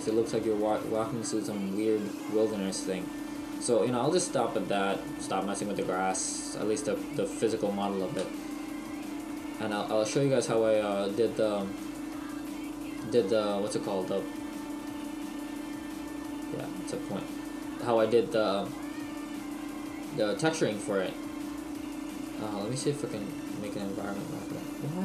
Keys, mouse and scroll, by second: 10.2 Escape, 10.2 right click, 10.2 middle click, 13.0 click, 14.0 right click, 15.0 middle click, 17.0 click, 18.1 middle click, 23.8 click.